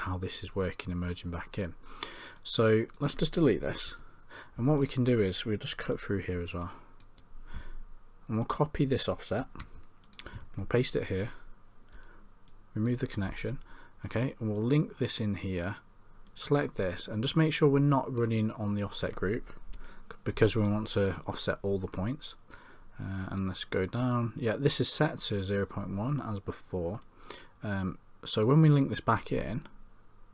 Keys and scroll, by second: 3.9 Delete, 10.5 ctrl+v.